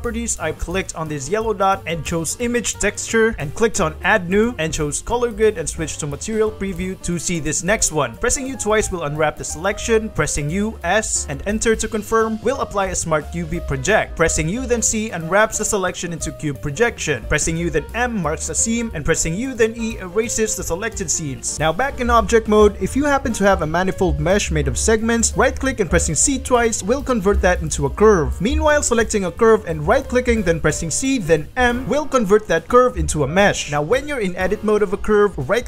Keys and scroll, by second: 5.6 z, 8.2 shift+3, 8.4 u, 10.4 u, 10.9 s, 11.3 Return, 14.0 alt+Tab, 14.1 u, 14.6 c, 17.3 u, 17.5 m, 19.0 u, 19.2 e, 22.0 shift+a, 22.2 shift+1, 23.3 2, 23.7 a, 24.5 Tab, 26.0 c, 28.1 Tab, 30.4 c, 31.4 m.